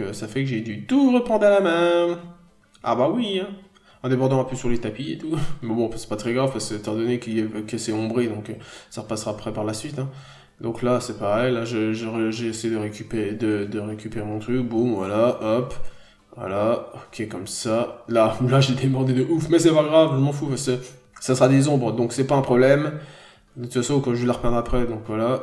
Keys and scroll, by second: 1.8 ctrl+z, 3.5 n, 3.8 b, 7.9 n, 8.2 b, 9.8 n, 10.3 b, 11.8 n, 12.4 b, 12.7 n, 13.2 p, 21.9 n.